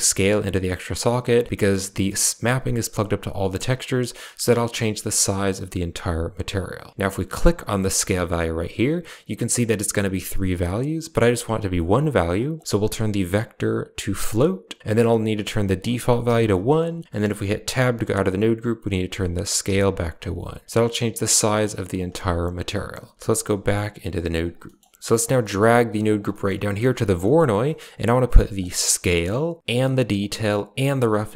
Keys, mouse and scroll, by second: 1.4 middle click, 1.8 middle click, 3.5 middle click, 4.4 middle click, 5.9 click, 7.2 click, 12.4-14.2 drag, 15.6 click, 17.0 middle click, 17.5 Tab, 18.9-19.9 drag, 20.4-21.8 drag, 22.3 click, 23.1 Tab, 24.0 click, 24.5 middle click, 25.0 click, 25.3 middle click, 25.5 g, 26.2 middle click, 26.6 g, 27.1 middle click, 27.5 middle click, 28.6-29.2 drag, 29.6 click, 30.7-31.3 drag.